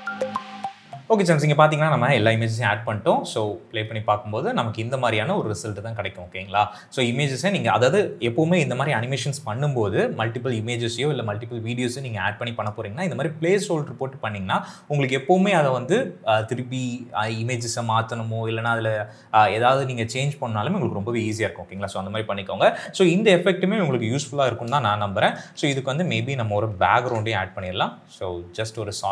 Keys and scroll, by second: 3.2 KP_0, 24.2 space, 25.4 s, 26.8 ctrl+y.